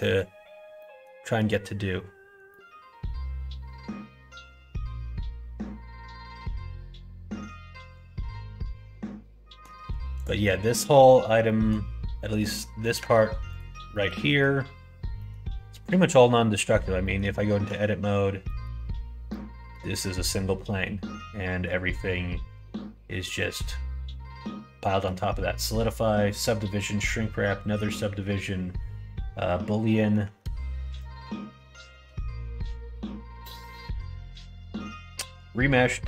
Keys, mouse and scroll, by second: 0.0 middle click, 0.8 middle click, 2.5-9.6 middle drag, 10.1 click, 11.4 middle click, 12.4 middle click, 12.9 Tab, 13.5 click, 13.9 middle click, 14.2 middle click, 15.1 middle click, 16.3 middle click, 17.0 middle click, 17.3 middle click, 17.8 Tab, 18.4 middle click, 19.2 middle click, 29.8 middle click, 32.6 Tab, 32.6 middle click.